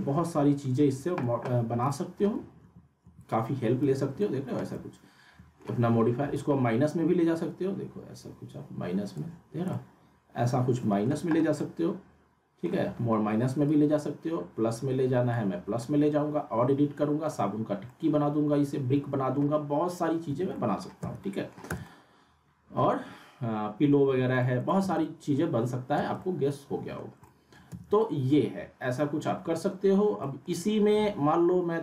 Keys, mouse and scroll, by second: 1.2 ctrl+z, 1.9 alt+middle click, 2.6 ctrl+z, 3.8 z, 4.2-5.6 alt+middle drag, 6.3-9.4 drag, 9.5 scroll up 1, 9.7-11.3 alt+middle drag, 11.6-12.8 alt+middle drag, 13.6-15.5 drag, 15.6 scroll down 2, 15.8-17.3 alt+middle drag, 19.8-20.3 scroll down 2, 20.3 z, 20.5 alt+middle click, 21.0 z, 21.2 alt+middle click, 21.6 z, 21.8-23.1 alt+middle drag, 24.0 z, 24.4 alt+middle click, 24.8 z, 25.0-25.6 alt+middle click, 25.9 z, 26.2-27.1 alt+middle click, 26.9 scroll down 1, 27.4 alt+middle click, 27.7 z, 28.0 alt+middle click, 28.7 scroll down 1, 28.9 alt+middle click, 30.2 alt+middle click.